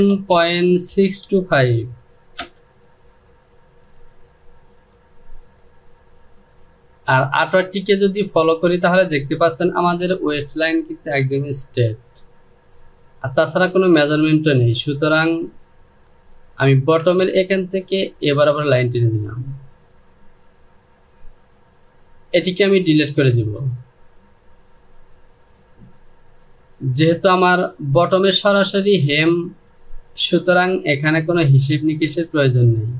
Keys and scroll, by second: 0.0-1.2 typing, 2.0 Return, 22.1 Delete.